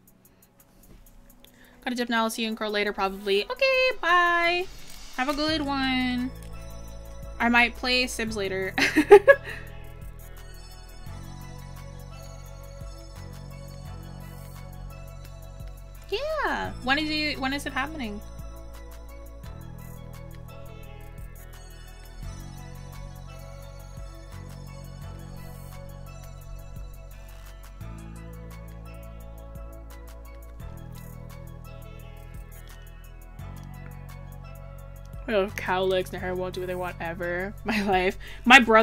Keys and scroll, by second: 29.1 ctrl+z.